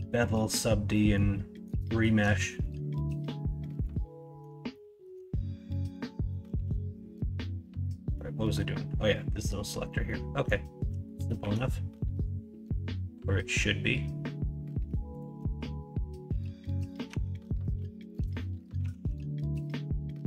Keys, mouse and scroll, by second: 0.2-0.5 middle drag, 0.9 middle drag, 1.8 shift+middle drag, 2.4-3.8 middle drag, 4.7-5.0 shift+middle drag, 5.8 middle click, 6.3-8.1 middle drag, 10.1 middle click, 10.9 middle click, 11.4 shift+a, 17.1 Tab, 18.1 middle click, 18.8 s.